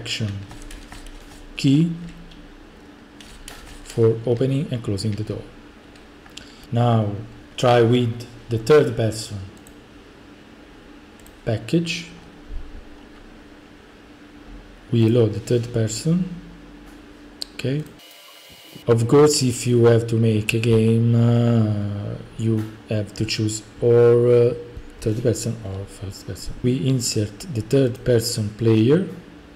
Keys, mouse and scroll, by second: 0.5-2.0 typing, 3.3-6.6 typing, 9.7-10.8 drag, 11.3 click, 12.2 scroll, 13.0-14.1 scroll, 15.1 click, 17.9 click, 26.6 click, 28.0-29.1 drag.